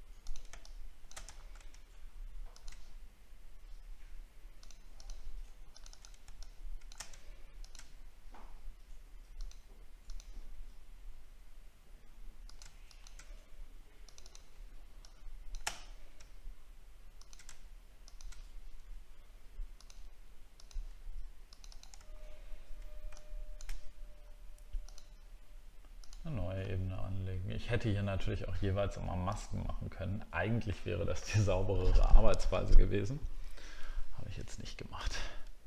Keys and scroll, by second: 1.4 alt+scroll up 5, 22.1-22.6 alt+scroll down 2.